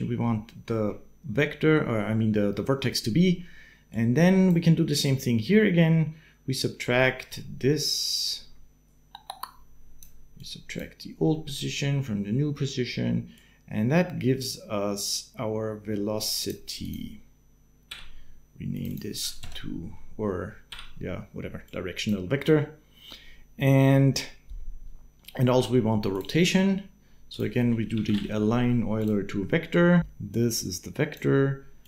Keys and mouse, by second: 3.7 click, 6.8 click, 7.2 middle click, 7.7-9.8 drag, 11.1 click, 13.1 click, 15.3 click, 16.6 click, 17.7 n, 18.5 click, 20.5 n, 21.7 click, 25.0 middle click, 26.4 shift+a, 30.1 click, 31.6-31.8 drag.